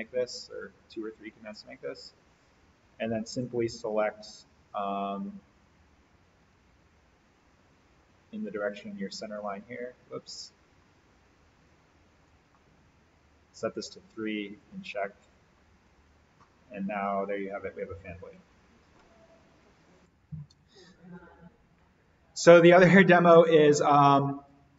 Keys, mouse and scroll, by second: 3.0 alt+v, 4.6 right click, 5.5 click, 6.4 alt+v, 9.2 click, 10.8-12.0 scroll down 1, 12.0 click, 14.5 click, 15.3-15.8 scroll up 1, 16.0 alt+v, 16.4-19.2 middle drag, 19.0 scroll down 1, 20.0 click, 23.6-23.9 scroll up 1.